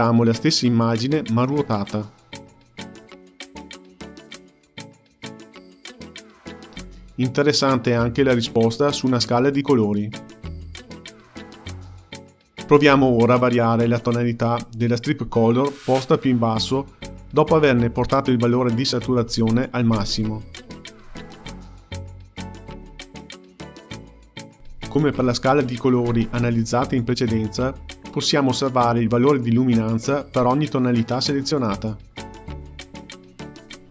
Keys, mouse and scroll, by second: 4.1 Left, 7.0 shift+a, 12.1 Left, 13.7 g, 16.1 click, 18.5 click.